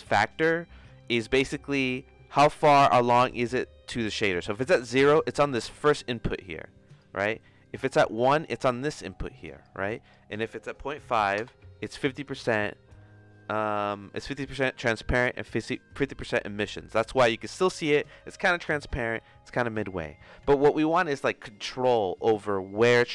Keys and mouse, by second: 1.8 click, 4.5 click, 5.5-7.0 drag, 7.6 click, 8.6 click, 10.1-15.7 drag.